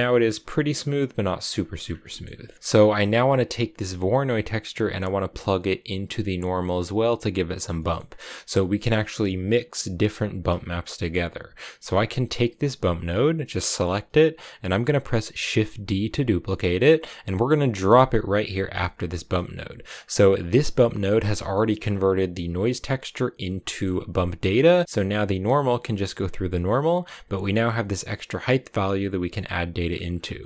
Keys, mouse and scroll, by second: 1.3-1.8 scroll down 6, 1.9 shift+middle click, 2.3 scroll down 5, 2.5 middle click, 2.9 click, 7.6 middle click, 7.9-10.9 scroll up 2, 11.9 click, 15.4 shift+d, 18.9 middle click, 19.4 click, 19.7-20.3 scroll up 4, 20.3 click, 21.3 middle click, 21.6 scroll down 5, 23.4 middle click, 23.6-24.3 scroll up 3, 24.3 middle click, 24.7-27.6 scroll up 1, 29.8-30.2 scroll down 6, 30.2-30.4 middle drag.